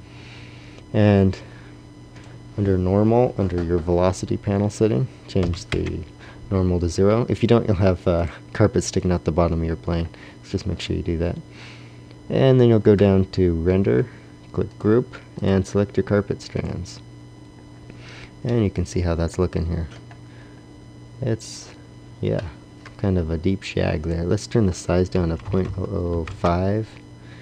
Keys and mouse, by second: 0.9-3.8 drag, 8.8-14.5 drag, 14.8-17.7 drag, 19.3 middle click, 19.5 middle click, 25.7 KP_0.